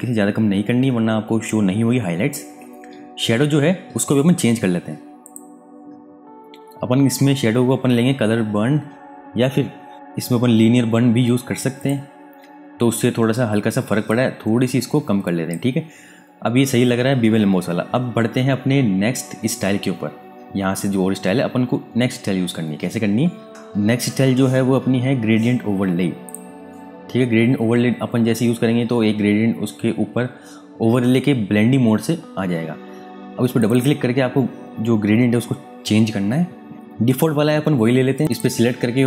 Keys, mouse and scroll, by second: 5.2 click, 9.9 click, 11.7 click, 26.2 click, 33.5 click, 35.9 click, 38.1 click.